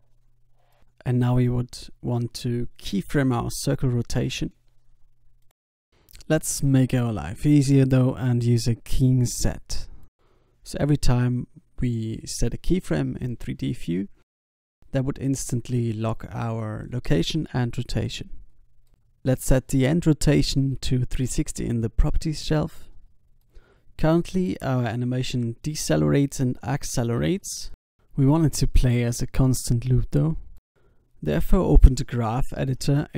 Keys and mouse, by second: 1.1-5.7 drag, 5.7 i, 8.2-10.3 drag, 11.3 i, 12.5-14.5 drag, 14.8-18.7 middle drag, 16.1-19.7 drag, 20.7 i, 22.7 alt+a, 26.7 alt+a, 28.0 click, 30.3 n.